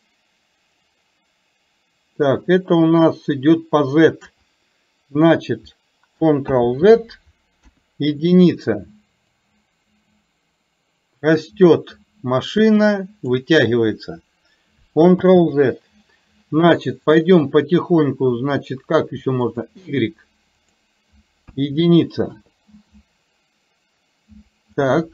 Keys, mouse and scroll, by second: 6.6 ctrl+z, 7.7 KP_1, 9.5-13.5 drag, 17.1 click, 19.5 click, 20.6-22.5 drag.